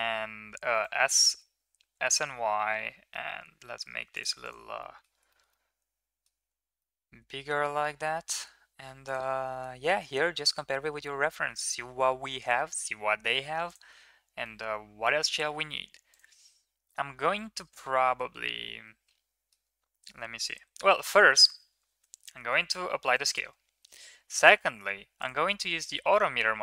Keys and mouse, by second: 0.8 y, 1.7 s, 4.6 middle drag, 5.1 shift+middle click, 5.4-6.1 middle drag, 6.6-7.7 middle drag, 14.2-15.4 middle drag, 17.6-19.4 middle drag, 20.2 middle click, 20.5 Tab, 21.0 Tab, 21.7 ctrl+s, 22.2 ctrl+a, 25.0 click.